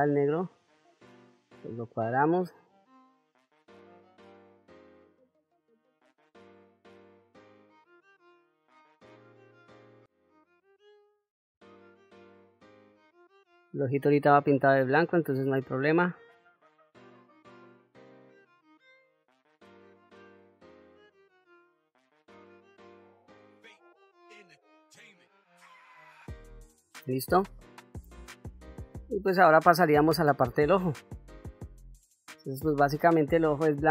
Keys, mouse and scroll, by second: 0.0 ctrl+middle click, 0.5 middle click, 2.4-9.5 drag, 10.2 middle click, 11.1 ctrl+middle click, 12.1 ctrl+middle click, 12.5 middle click, 13.8 middle click, 14.6 middle click, 15.9-17.0 middle drag, 17.2 ctrl+middle click, 17.4 shift+middle click, 17.8 click, 18.1 ctrl+z, 18.2 middle click, 18.5 click, 19.1 click, 19.5 click, 19.9 click, 20.6 click, 20.7 ctrl+middle click, 21.1 ctrl+middle click, 21.2 shift+middle click, 21.8 middle click, 22.1 middle click, 22.5 click, 22.8 click, 23.1 click, 23.7 middle click, 23.8 click, 24.2 click, 24.6 middle click, 24.7 ctrl+middle click, 24.8 ctrl+middle click, 25.1 click, 25.6 middle click, 25.8 click, 26.1 ctrl+middle click, 26.4 ctrl+middle click, 26.7 shift+middle click, 27.1 ctrl+shift+middle click, 28.1 middle click, 30.3 shift+middle click, 31.2 ctrl+middle click, 33.6 click.